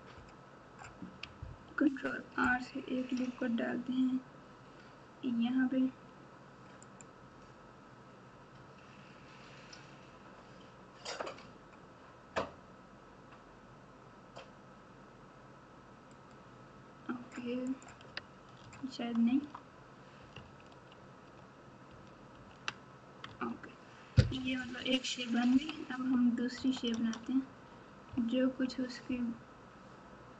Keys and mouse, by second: 1.6 ctrl+r, 17.6 click, 18.6 Tab, 19.2 Tab, 20.7 ctrl+z, 21.3 ctrl+z, 22.3 ctrl+z, 23.2 Tab, 24.4 KP_6, 24.6 KP_6, 25.5 KP_1, 26.5 KP_Subtract, 26.8 KP_Subtract, 28.0 ctrl+KP_2, 28.5 ctrl+KP_2.